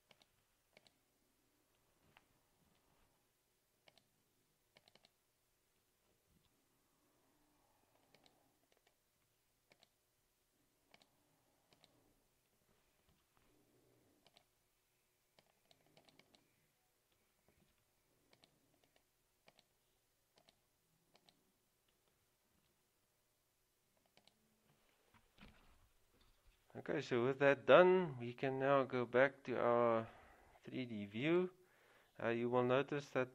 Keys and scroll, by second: 2.8 ctrl+v, 6.5 ctrl+c, 13.2 ctrl+v, 17.7 ctrl+c, 22.7 ctrl+v.